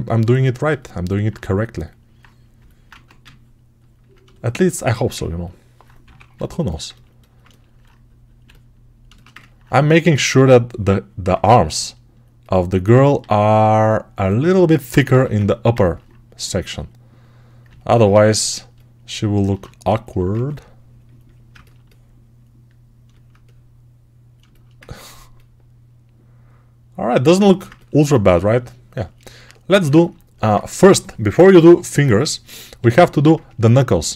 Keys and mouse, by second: 2.8 1, 5.9 6, 6.2-8.9 alt+drag, 8.9-13.1 ctrl+alt+shift+right drag, 13.1 alt+q, 15.0 g, 17.5-22.9 alt+right drag, 20.2 2, 32.6 right click, 32.6 1, 33.5-34.1 alt+right drag.